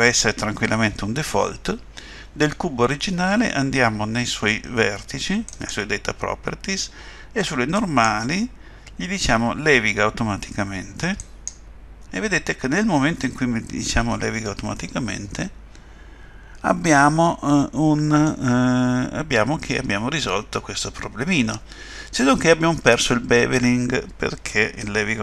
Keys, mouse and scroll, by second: 5.5 click, 7.8 click, 11.2 click, 14.8 middle click, 19.4 middle click.